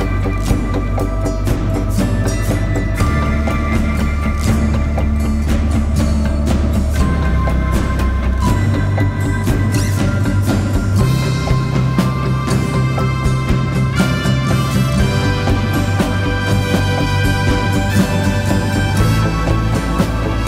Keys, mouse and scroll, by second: 1.2 alt+BackSpace, 2.4 ctrl+d, 3.5 ctrl+t.